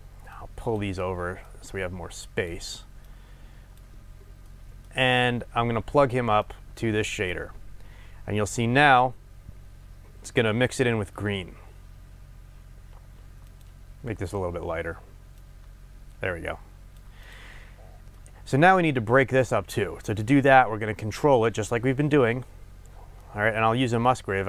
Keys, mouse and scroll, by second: 0.2 click, 1.5 click, 3.1-4.5 drag, 4.5-6.5 middle drag, 5.0-6.5 scroll up 2, 6.5-13.6 drag, 18.2-24.4 middle drag, 21.1-23.2 scroll up 2.